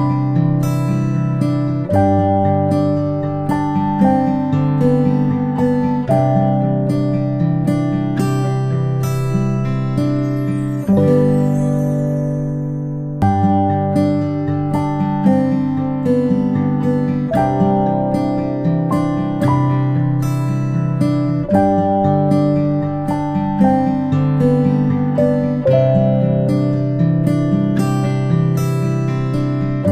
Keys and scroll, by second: 11.0 ctrl+a, 28.6-29.5 ctrl+space.